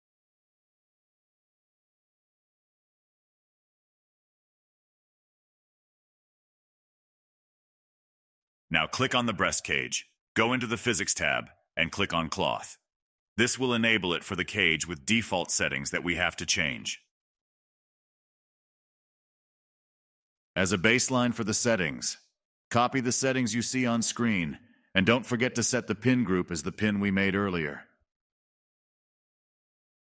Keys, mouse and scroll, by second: 0.9 click, 2.1 space, 2.7-3.7 middle drag, 3.7 space, 4.1 click, 4.3 space, 6.3 space, 7.3 click, 7.6-7.9 scroll down 17, 9.3-10.7 scroll up 2, 10.7 click, 11.0 n, 12.0-17.3 shift+middle drag, 17.5-19.6 drag, 21.0-24.1 drag, 28.9-30.1 drag.